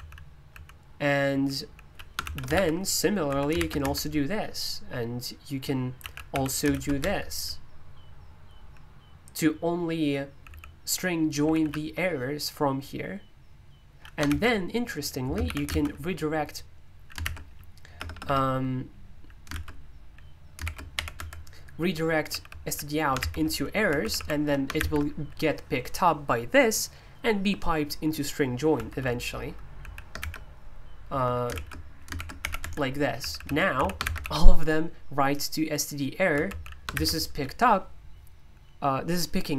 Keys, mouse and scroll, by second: 1.0-3.8 typing, 5.7-7.2 typing, 8.5 typing, 9.7-11.6 typing, 14.3-15.7 typing, 17.2-19.5 typing, 20.6-21.1 typing, 22.3-25.3 typing, 28.7 Escape, 29.8-34.7 typing, 36.3-36.9 typing.